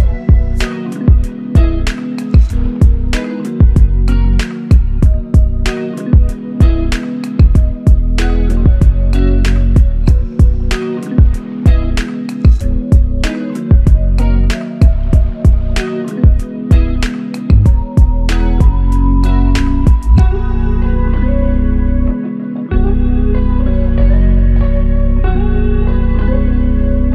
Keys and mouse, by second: 2.9 alt+click, 7.0 double click, 19.6 double click.